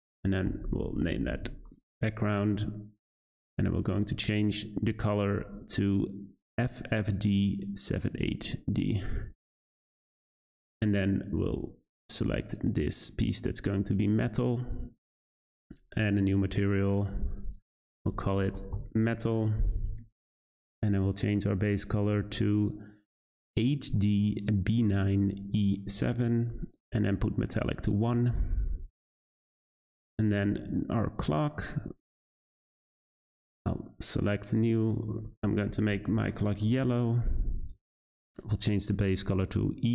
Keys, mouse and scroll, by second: 12.7 click, 16.2 click, 16.6-18.7 drag, 21.1 click, 27.3-31.3 drag, 32.4 click, 33.5-35.6 drag, 37.6 click.